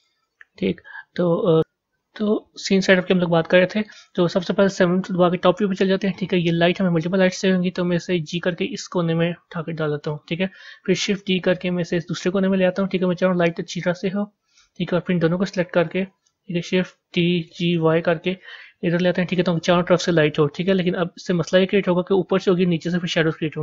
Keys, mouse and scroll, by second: 0.7-1.5 middle drag, 2.8-3.9 middle drag, 3.9 scroll down 1, 5.1 KP_7, 6.3 click, 8.0 g, 10.9 shift+d, 15.7 shift+click, 17.0 shift+d, 21.4-23.6 middle drag.